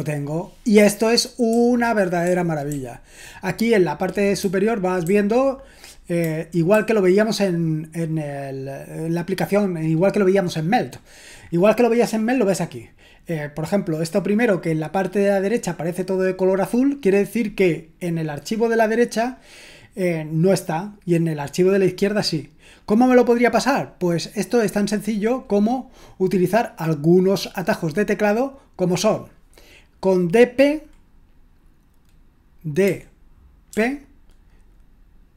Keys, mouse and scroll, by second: 1.5-2.6 typing, 5.0-6.7 typing, 27.4-32.8 drag, 32.8-33.7 typing.